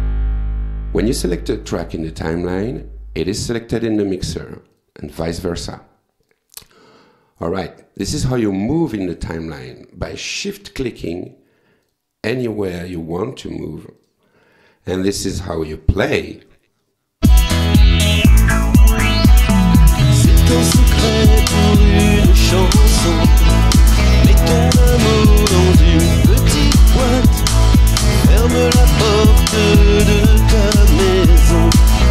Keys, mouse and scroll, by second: 4.7 click, 6.3 click, 11.0 shift+click, 11.9 shift+click, 12.8 shift+click, 14.0 shift+click, 14.9 shift+scroll up 1, 17.2 space.